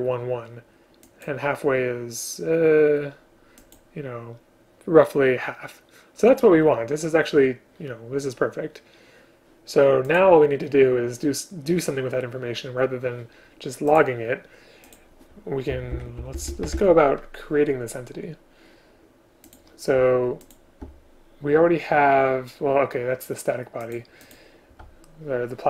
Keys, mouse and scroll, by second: 16.0 ctrl+/, 16.2 Up, 16.4 Up, 16.8 ctrl+/, 20.5 shift+click.